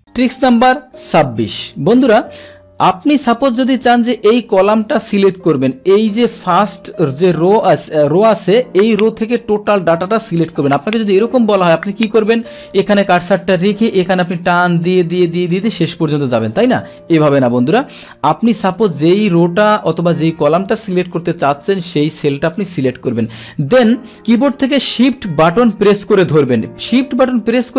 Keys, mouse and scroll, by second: 2.8 click, 3.9 click, 4.5 click, 4.9 click, 6.3 click, 9.3 click, 10.5 click, 12.7-15.9 drag, 17.5 ctrl+Home, 18.7 click, 21.8 click.